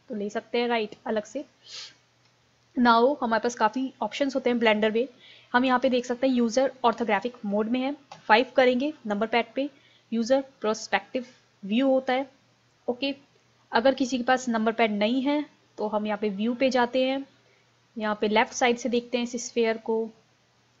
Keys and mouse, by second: 0.9 click, 1.5 click, 1.9-3.1 drag, 3.8-7.2 middle drag, 8.2 KP_5, 19.8-20.8 middle drag.